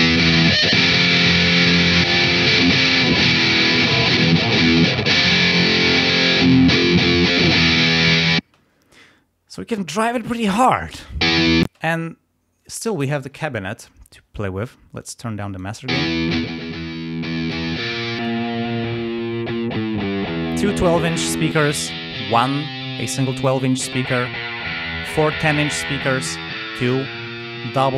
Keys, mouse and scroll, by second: 0.1 click, 0.9 click, 2.0 click, 4.1 click, 5.5 click, 5.9 right click, 8.5 space, 11.2 space, 15.0 click, 15.9 space, 16.3-17.7 drag, 18.1 click, 21.5 click, 23.9 click, 25.9 click.